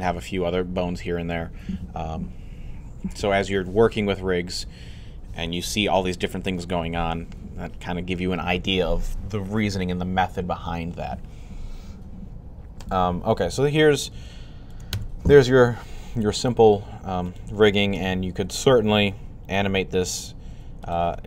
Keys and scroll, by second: 20.4-20.8 typing.